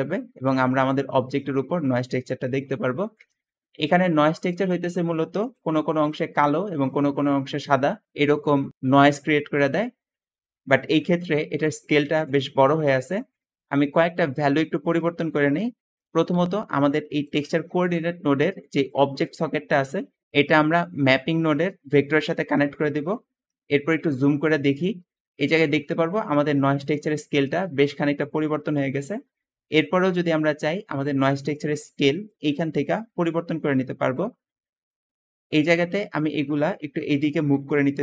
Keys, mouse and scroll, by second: 0.3 Escape, 5.0 `, 12.1 Escape, 12.1 Escape, 12.9 middle click, 16.2 g, 28.7-29.0 scroll down 2, 29.7 middle click, 30.0 middle click, 30.0 scroll up 2, 30.2 scroll down 2, 30.4 middle click, 37.0-37.5 scroll down 2, 37.4 g.